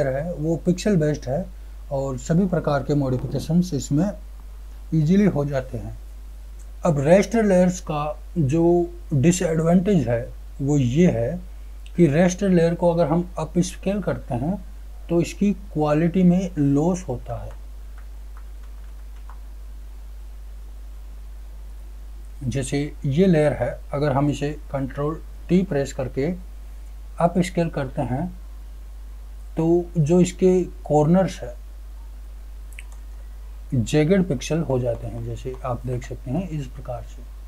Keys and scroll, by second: 17.2 ctrl+z, 25.3 ctrl+t.